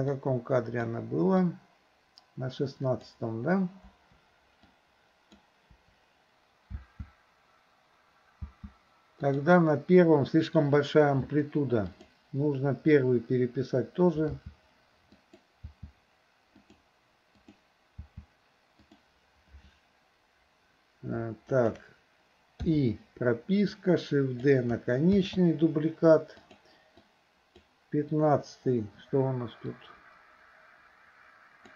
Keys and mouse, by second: 0.2-1.0 drag, 1.5-3.1 drag, 3.9 Delete, 4.7 click, 4.8-5.4 drag, 5.9 Delete, 6.8 space, 8.7 space, 9.3 click, 12.0 click, 14.4 r, 15.6 r, 17.5 click, 18.0 r, 21.5 shift+click, 22.7 i, 23.7-24.5 drag, 25.2 shift+d, 27.0-27.7 drag, 29.8-31.7 drag.